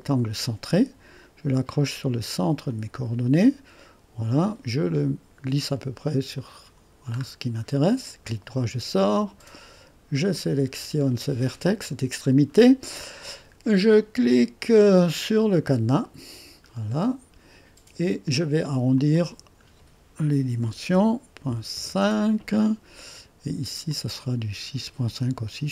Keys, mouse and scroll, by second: 0.0 click, 2.6 click, 6.3 click, 7.2-7.8 scroll up 2, 7.8 right click, 10.3-12.7 drag, 16.0 click, 16.7-17.2 scroll down 2, 18.9-20.1 drag, 20.6 KP_6, 20.9 KP_Decimal, 21.5 KP_5, 21.7 Return, 23.9-24.9 drag.